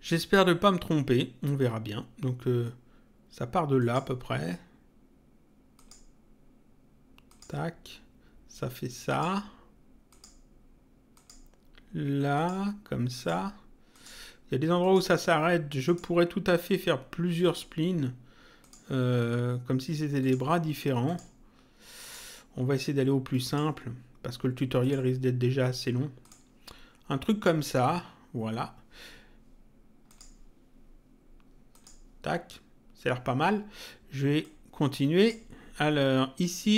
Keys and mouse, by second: 3.8 click, 5.8 click, 7.3 click, 9.1 click, 10.1 click, 12.3 click, 17.4 click, 18.6 click, 20.2 click, 23.5 click, 24.8 click, 26.2 click, 30.1 click, 31.7 click, 34.4 click.